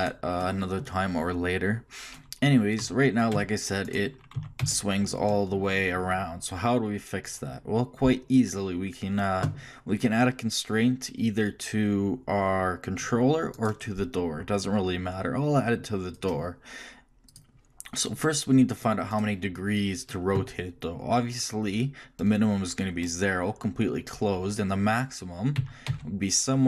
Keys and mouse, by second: 2.8 r, 4.3 r, 13.6-15.4 right drag, 16.1-19.1 drag, 19.1-20.9 right drag, 25.5 r.